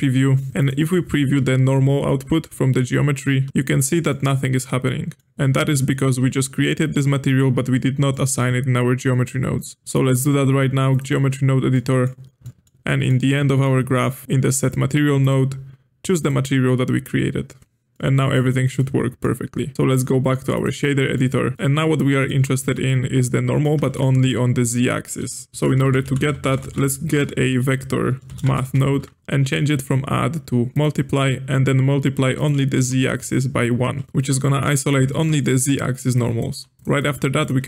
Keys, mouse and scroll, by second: 0.5 ctrl+shift+click, 0.6 ctrl+shift+click, 4.1-7.1 middle drag, 8.1-9.8 middle drag, 9.8-11.7 drag, 11.7 middle click, 12.0-12.4 scroll down 2, 12.4 middle click, 13.2-13.6 scroll down 1, 13.6-15.2 scroll up 5, 15.2-17.9 drag, 17.9-19.7 middle drag, 19.7-20.8 drag, 20.8-21.1 scroll down 3, 21.1-25.5 middle drag, 25.5 click, 25.6 space, 29.8-33.2 drag, 34.0-36.1 middle drag, 36.1 click, 36.5 g, 37.0 click, 37.4 click.